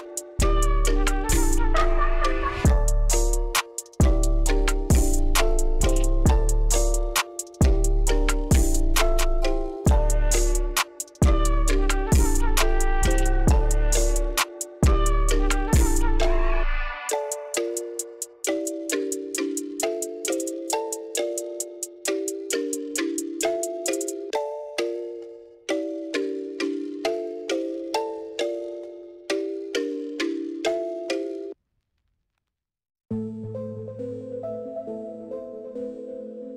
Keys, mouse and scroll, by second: 0.5-2.0 shift+middle drag, 2.2-3.0 scroll up 3, 3.2 shift+middle click, 4.7-8.5 shift+drag, 9.2-10.1 shift+middle drag, 11.1 shift+middle click, 12.6-13.9 shift+drag, 14.2 shift+middle click, 14.9-15.4 scroll down 2, 15.4 shift+middle drag, 16.7 shift+middle click, 17.2-17.7 shift+middle drag, 18.0 shift+middle click, 18.8 shift+middle click, 20.0-22.5 shift+middle drag, 23.3-28.3 shift+drag, 28.5 shift+middle click, 29.0 shift+middle click, 29.5 shift+middle click, 29.8 scroll down 2, 30.0 shift+middle click, 30.8 scroll down 2, 31.0 shift+middle click, 34.4-36.5 shift+drag.